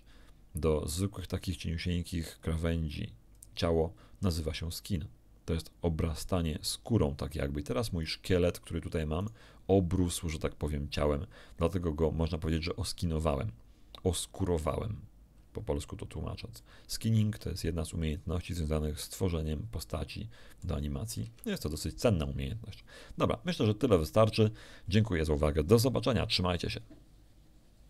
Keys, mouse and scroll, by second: 3.3 click, 8.0 right click, 9.2 right click, 16.0 scroll down 1, 16.5 shift+middle click, 19.0-20.8 middle drag, 21.2 KP_1, 27.8 q.